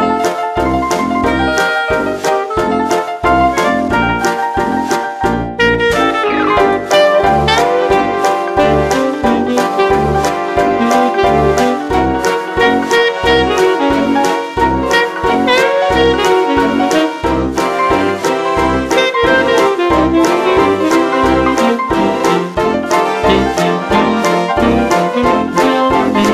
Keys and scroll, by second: 1.1 ctrl+u, 2.1 space, 2.9 space, 3.9 space, 4.5 ctrl+alt+z, 5.3 ctrl+alt+z, 6.0 ctrl+u, 8.6 space, 8.8 ctrl+alt+z, 9.8 ctrl+u, 9.9 space, 10.0 ctrl+alt+z, 10.8 space, 11.7 ctrl+u, 12.1 ctrl+u, 12.3 space, 12.4 ctrl+u, 13.1 space, 13.4 ctrl+u, 14.1 ctrl+u, 14.4 ctrl+u, 14.8 ctrl+u, 15.2 ctrl+u, 15.5 ctrl+u, 16.1 space, 16.7 ctrl+alt+z, 16.9 ctrl+u, 17.0 space, 18.0 ctrl+alt+z, 18.3 space, 19.9 ctrl+alt+z, 20.6 ctrl+u, 20.8 space, 21.0 ctrl+alt+z, 21.2 ctrl+u, 22.6 space, 23.7 ctrl+u, 24.4 ctrl+alt+z.